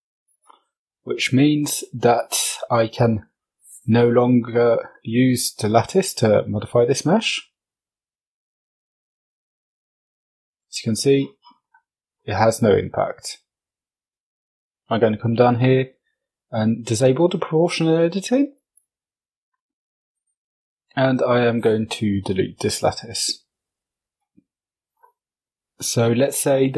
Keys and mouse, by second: 0.1 alt+h, 1.7 click, 3.4 click, 4.6 click, 5.1 click, 7.3 Tab, 7.9 click, 8.4 right click, 9.1 g, 17.5 click, 18.4 Tab, 19.5 x, 26.6 right click.